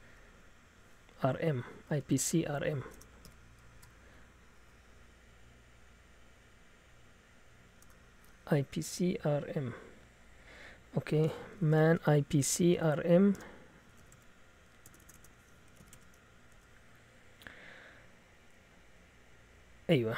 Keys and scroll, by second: 1.1-3.8 typing, 1.7 Left, 6.3 Up, 7.8 BackSpace, 10.4 Down, 10.6 Down, 11.3-17.6 typing.